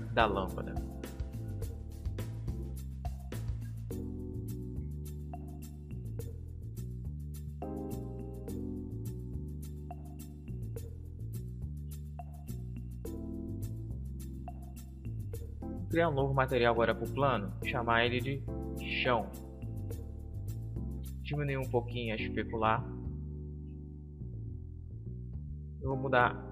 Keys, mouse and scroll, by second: 1.6 KP_0, 3.1-5.8 middle drag, 5.8-7.7 drag, 9.5 Home, 12.5-19.3 drag, 21.6-24.6 drag, 25.5-26.5 drag.